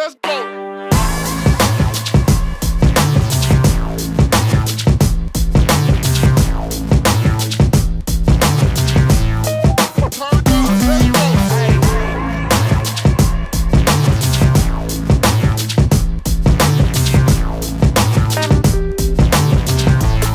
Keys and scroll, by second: 2.7 space, 5.3 shift+s, 12.5 space, 16.3 ctrl+shift+g, 19.9 shift+m.